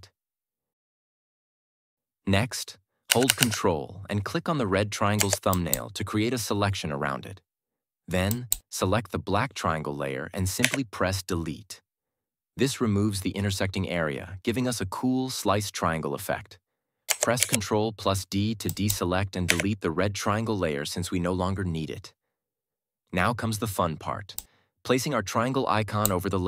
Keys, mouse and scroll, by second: 3.0 Down, 5.4 ctrl+click, 8.2 click, 10.5 Delete, 17.3 ctrl+d, 18.6 click, 19.4 Delete, 24.2-26.1 drag.